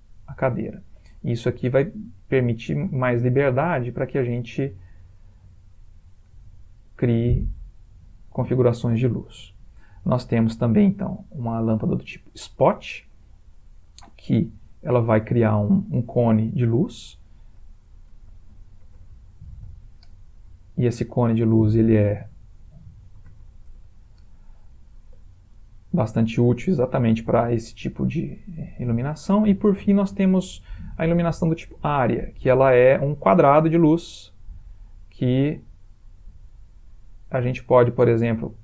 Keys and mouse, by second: 2.3 click, 2.8 g, 4.2 click, 4.8 g, 6.1 click, 11.2 click, 14.4 g, 17.7 click, 18.8-19.2 typing, 21.6 ctrl+click, 23.5 0, 25.4 ctrl+middle click, 26.3 middle click, 30.1 click, 31.4 middle click, 34.3 click.